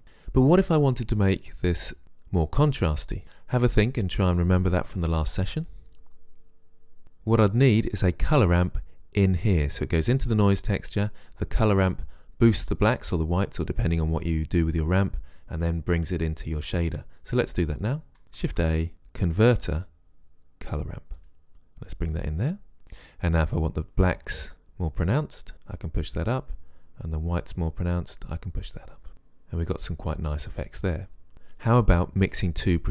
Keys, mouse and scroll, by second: 18.5 shift+a, 22.3 click, 27.4 click.